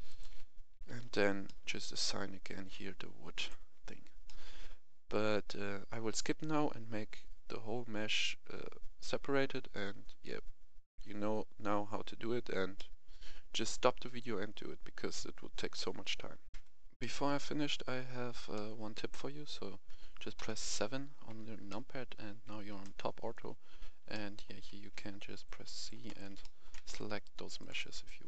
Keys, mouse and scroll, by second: 0.0 shift+right click, 0.7 shift+f, 1.4 middle click, 3.3 click, 4.2-15.7 middle drag, 16.4 Tab, 16.5 F10, 16.9-18.7 middle drag, 18.7-20.3 scroll up 1, 20.3 KP_7, 21.6 shift+middle click, 23.2-23.9 scroll up 1, 24.1 shift+middle click, 24.9 shift+c, 25.4 click, 26.0 right click, 26.4 shift+middle click, 26.9 click, 27.6-28.2 right drag.